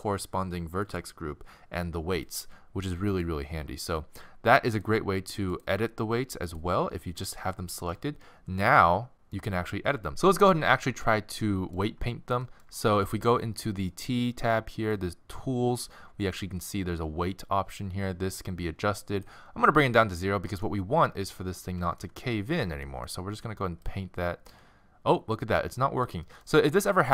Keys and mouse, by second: 0.9-7.0 drag, 7.0-10.1 middle drag, 11.1-14.9 middle drag, 14.9-16.8 drag, 17.7-20.0 drag, 20.0-26.1 middle drag, 26.2-27.1 middle drag, 26.9-27.1 drag.